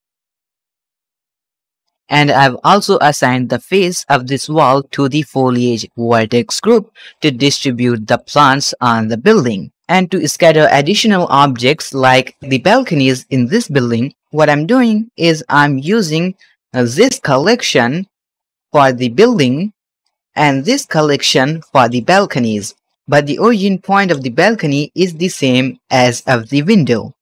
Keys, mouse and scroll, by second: 0.1 click, 2.6 click, 7.0-7.5 middle drag, 8.0 scroll down 1, 8.0-8.5 shift+middle drag, 8.6 scroll down 1, 8.8 middle click, 9.2-9.7 shift+middle drag, 9.9-10.2 shift+middle drag, 10.7 click, 11.2-11.6 middle drag, 11.8-12.4 shift+middle drag, 12.4-12.7 scroll up 2, 13.8-14.1 scroll down 2, 14.5-15.8 shift+middle drag, 16.1 scroll up 2, 16.4 shift+middle click, 16.8-17.1 scroll up 1, 17.1 drag, 17.5 shift+click, 18.0 shift+click, 18.3-18.7 shift+middle drag, 18.8 scroll up 1, 19.2 g, 20.0-20.3 right drag, 20.6 click, 21.1 shift+click, 21.8 g, 22.5 right click, 22.8 click, 24.0 g, 24.5-25.2 right drag, 25.2 click, 26.2 g, 26.7 right click, 27.0-27.2 scroll down 4.